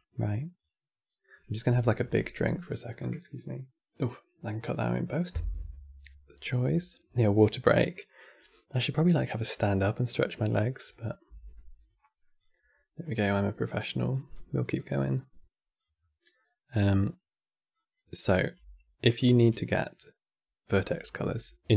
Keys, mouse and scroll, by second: 0.3 click, 11.2 middle click, 12.1 click, 13.8 click, 14.4-15.7 drag, 15.7-17.4 middle drag, 17.4 click, 17.9 middle click, 18.2 scroll up 1, 18.3 c, 19.0 x.